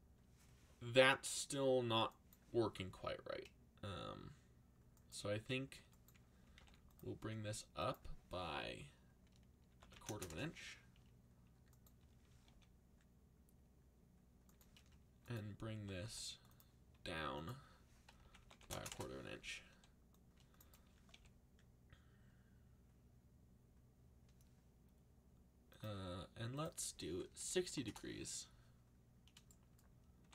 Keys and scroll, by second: 6.2-7.1 typing, 9.4-10.7 typing, 12.4 r, 15.7 g, 16.0 x, 17.9-19.7 typing, 21.1 r, 27.1-28.1 typing, 29.9-30.3 typing.